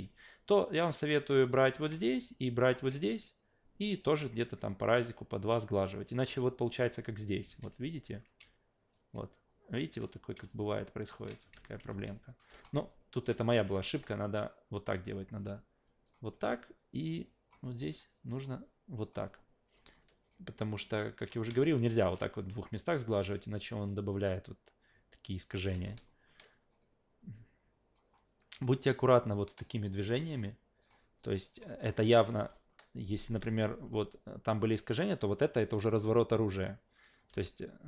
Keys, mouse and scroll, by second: 1.1-1.6 drag, 2.3 shift+click, 3.9 click, 4.6 click, 6.3-6.7 alt+right drag, 7.5 ctrl+z, 7.8 ctrl+z, 8.9 shift+z, 10.5 shift+z, 11.1 shift+z, 11.9 ctrl+z, 12.6 alt+middle click, 12.9 alt+right click, 13.5 click, 13.8 alt+middle click, 14.4 click, 16.0 click, 17.0 click, 18.3 click, 19.0 click, 19.8 alt+middle click, 20.2 click, 21.0 click, 21.7 shift+click, 22.8 click, 25.6 ctrl+z, 25.9-26.2 alt+middle drag, 26.7-27.9 drag, 30.3 click, 30.8 click, 31.6 click, 31.9 alt+middle click, 32.5 alt+middle click, 33.5 click, 35.1-35.4 drag, 35.8 click, 36.6-37.2 drag, 37.3 Delete.